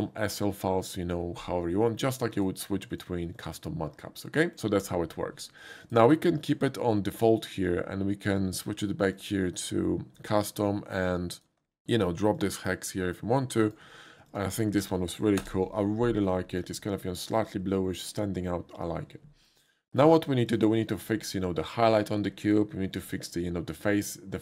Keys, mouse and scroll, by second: 2.3 click, 2.9 click, 3.4 click, 5.9 click, 6.4 click, 7.1 click, 9.2 click, 11.1 click, 11.8 ctrl+c, 12.4 click, 13.6 click, 14.3 click, 14.6 click, 14.8 ctrl+v, 15.4 Return, 16.3 middle drag, 17.1 middle click, 17.9 shift+middle click, 20.5 shift+click, 23.0 Tab.